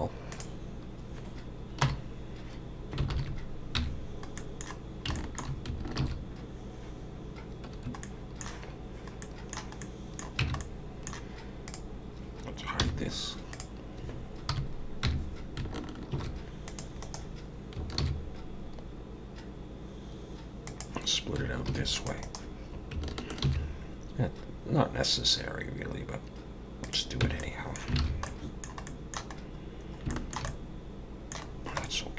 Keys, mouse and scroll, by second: 1.8 KP_7, 3.1 ctrl+KP_7, 3.8 Tab, 4.4 middle click, 4.8 scroll down 2, 5.2 shift+middle click, 6.0 ctrl+r, 8.0 middle click, 9.2 middle click, 9.8 middle click, 10.4 Tab, 10.6 middle click, 11.7 click, 12.8 h, 13.5 click, 14.5 KP_7, 15.1 Tab, 16.1 ctrl+r, 18.0 ctrl+b, 21.7 ctrl+r, 23.4 ctrl+b, 27.2 Tab, 27.4 middle click, 28.0 alt+a, 28.2 middle click, 28.8 middle click, 29.4-30.0 scroll up 4, 30.1 shift+middle click, 30.5 middle click, 31.5-31.8 scroll down 3, 31.8 middle click.